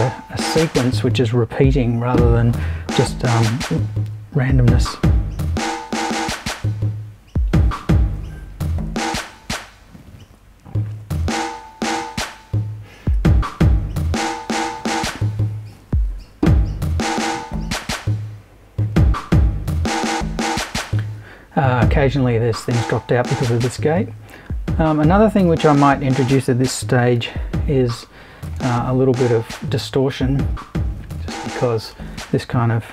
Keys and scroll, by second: 27.2 super+3.